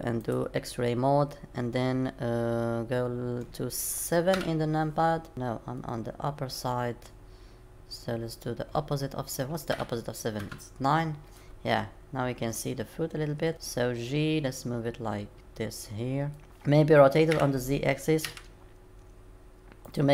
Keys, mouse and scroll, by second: 0.2 click, 4.3 KP_7, 5.3 middle click, 9.7 KP_7, 10.4 KP_9, 12.1-12.9 scroll up 2, 13.5 g, 17.3 r.